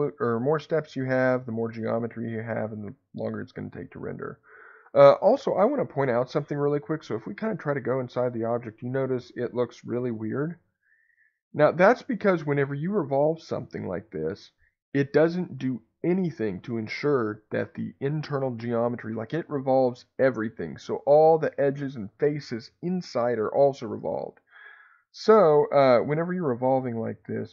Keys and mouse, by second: 2.5-4.3 middle drag, 9.4 middle click, 24.1 ctrl+z, 26.4 2.